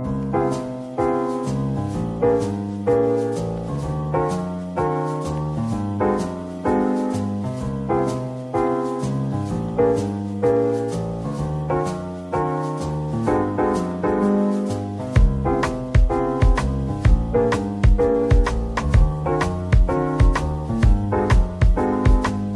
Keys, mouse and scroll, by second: 0.3-1.2 scroll up 1, 1.7 shift+right click, 1.7 click, 2.8-3.3 scroll down 1, 3.3 middle click, 3.8 Tab, 4.0 scroll down 1, 5.0 middle click, 5.8-6.7 scroll up 1, 6.7 Tab, 7.6 shift+click, 8.7 middle click, 9.5 right click, 10.3 double click, 10.6 Tab, 10.8 scroll down 1, 11.1 middle click, 11.9-12.2 scroll down 1, 12.6 middle click, 14.8 typing, 16.0 typing, 17.7-18.7 typing, 20.0 typing, 21.7-22.5 typing.